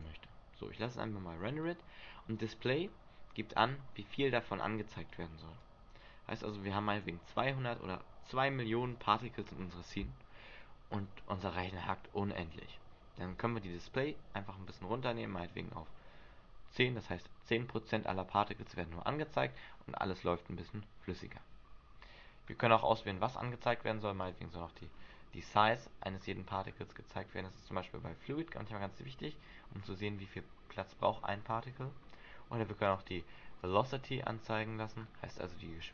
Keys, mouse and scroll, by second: 1.0 click, 2.6-3.5 scroll down 7, 3.5 middle click, 3.9-4.5 scroll up 3, 5.8 click, 13.9 click, 22.6-23.6 scroll up 9, 24.4 click, 24.8-25.2 scroll down 10, 25.9 scroll down 1, 26.6-27.3 scroll up 1, 28.7-29.9 scroll up 4, 29.9 click, 30.4 click, 31.2 scroll down 1, 31.9 scroll down 4, 33.0 click, 33.8 click, 34.7-35.3 scroll up 6.